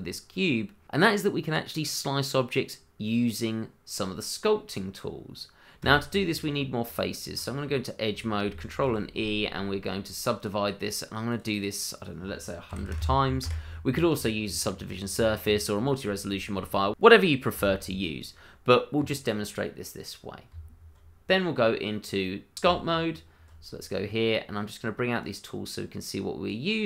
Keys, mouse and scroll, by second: 5.8 Tab, 8.8 ctrl+e, 10.4 click, 12.7 KP_1, 12.8 KP_0, 13.4 KP_Enter, 20.5 Tab, 21.6 middle click, 22.6 Tab, 25.2 click.